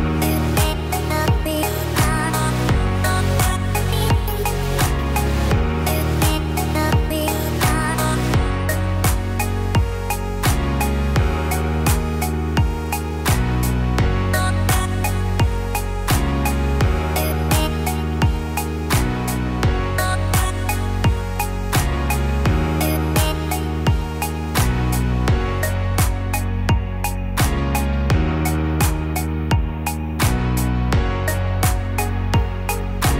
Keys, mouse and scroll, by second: 0.3 click, 3.9 click, 4.5 middle click, 5.7-6.2 scroll down 3, 6.0 middle click, 6.5-7.1 scroll up 2, 7.0 middle click, 8.0 click, 8.5 Tab, 11.9 click, 12.1 click, 14.3 shift+d, 16.9 p, 19.5 Tab, 20.1 click, 21.2 KP_1, 29.2 s, 33.0 click.